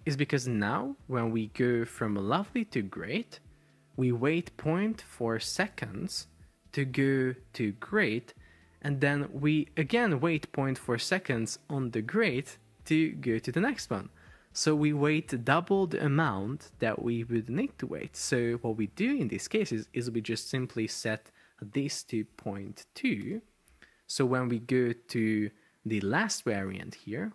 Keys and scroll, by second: 22.4-23.7 typing.